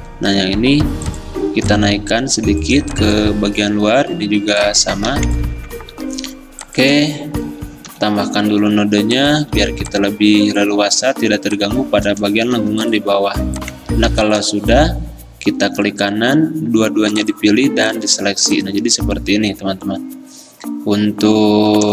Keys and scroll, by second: 1.1 a, 2.9 ctrl+z, 9.2 =, 9.7 a, 12.6 v.